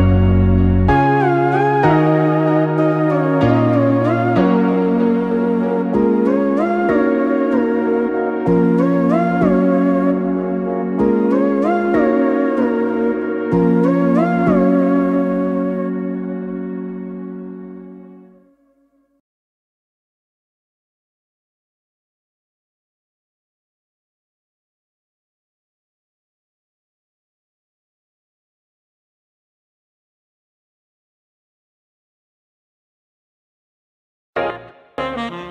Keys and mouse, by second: 3.7 click, 7.1 x, 10.4 click, 12.1 x, 14.9 click, 15.7 x, 18.2 click, 19.1 x, 22.2 click, 23.1 x, 26.0 click, 27.9 click, 29.1 x, 31.1-33.9 ctrl+middle drag, 33.9 a, 35.4 e.